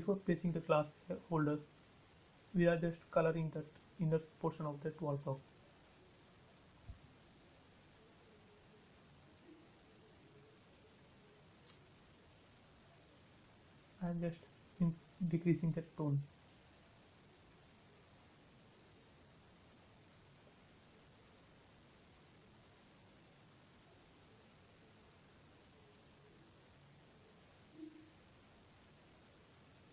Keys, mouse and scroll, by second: 3.3 click, 6.5 space, 7.0 scroll up 1, 7.4-9.9 shift+middle drag, 9.8 click, 9.9 click, 13.3-16.8 drag, 24.1 click, 29.4 click.